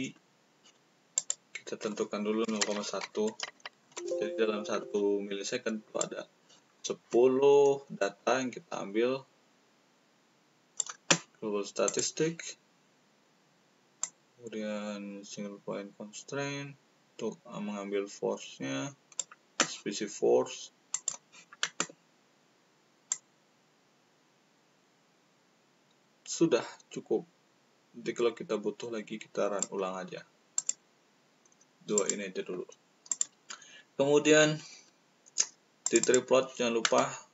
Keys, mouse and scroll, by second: 1.1 click, 3.0 1, 5.8 click, 8.1-10.9 drag, 11.8 click, 14.0-19.2 middle drag, 24.3-30.1 middle drag, 32.0 middle click, 33.1 click, 33.5 middle click, 34.7-35.1 middle drag, 35.8 click, 36.0 click.